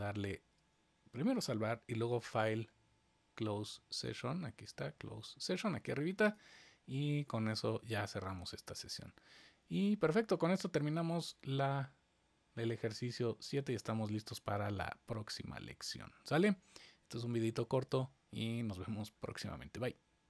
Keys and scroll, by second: 1.1 super+s.